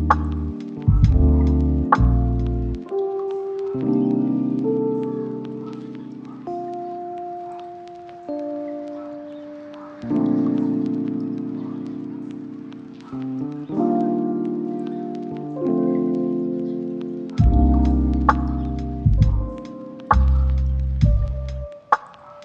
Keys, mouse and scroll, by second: 0.2 ctrl+click, 0.4 scroll up 1, 0.6 shift+middle click, 1.1 g, 1.8 ctrl+click, 2.2 scroll down 1, 2.7 shift+d, 3.5 ctrl+click, 3.8 shift+d, 4.4 ctrl+click, 4.7 shift+d, 5.4 ctrl+click, 5.9 shift+d, 6.6 ctrl+click, 7.6-8.1 scroll up 2, 7.8 shift+middle click, 8.3 ctrl+d, 8.9 shift+d, 9.9 ctrl+click, 10.5 d, 10.7 f, 12.3 g, 12.9 ctrl+click, 13.5 middle click, 13.7 scroll down 1, 13.8 scroll up 1, 13.9-14.7 scroll down 1, 14.7 KP_7, 15.2 g, 16.3 ctrl+click, 16.9 s, 17.1 y, 17.8 middle click, 18.5 1, 18.8-19.2 scroll up 1, 19.3 shift+middle click, 19.6 shift+scroll up 2, 19.9 middle click.